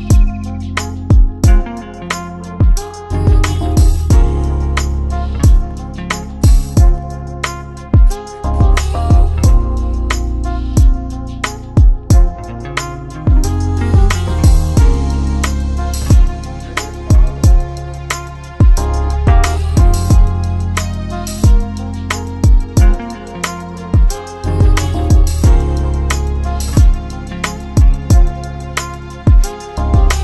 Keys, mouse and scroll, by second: 1.3 click, 2.9 shift+click, 9.5 ctrl+c, 9.8 ctrl+v, 11.3 click, 14.3 click, 17.4 click, 24.6 ctrl+d, 26.2 ctrl+d.